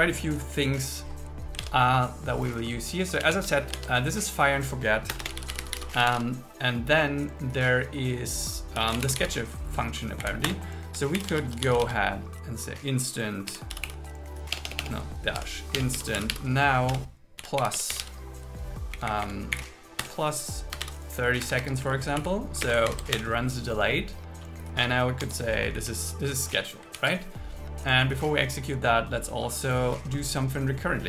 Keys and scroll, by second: 1.8 super+1, 3.3 super+1, 3.9 super+1, 5.2 Return, 10.2 Up, 10.5 Return, 11.2 shift+i, 14.6 BackSpace, 17.1 Return, 19.0 Down, 19.6 Up, 20.0 Return, 21.5 Escape, 21.9 Right, 22.7 space, 23.0 alt+8, 23.2 Return, 25.3 Tab, 25.8 Left, 27.0 super+s.